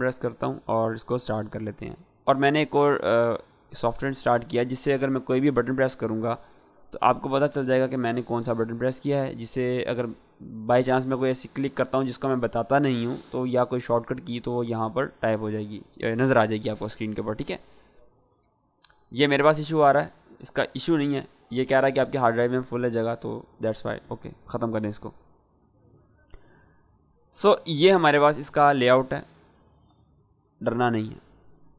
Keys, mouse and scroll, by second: 2.4 click, 6.6 click, 17.9 click, 22.9 click.